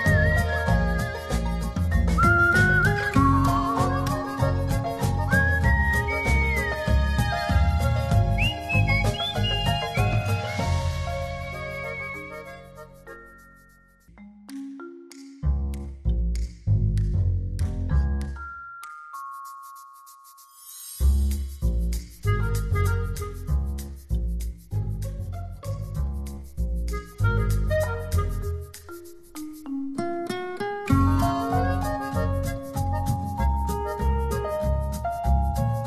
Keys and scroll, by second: 3.2 space.